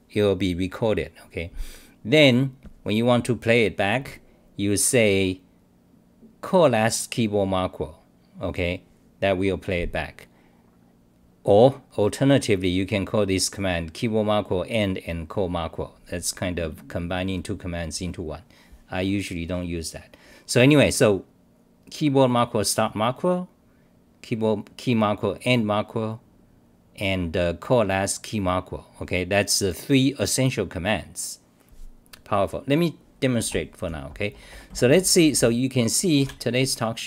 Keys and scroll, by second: 34.7-35.3 typing, 36.3 ctrl+r.